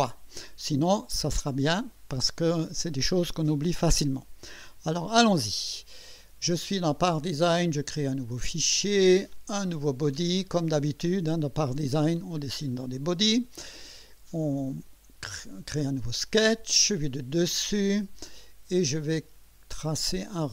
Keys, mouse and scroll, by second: 0.3-0.6 scroll up 2, 2.6-3.0 scroll up 2, 4.9 click, 7.5 click, 9.3 click, 12.7 click, 14.5 click, 17.1 click, 19.0-20.2 right drag.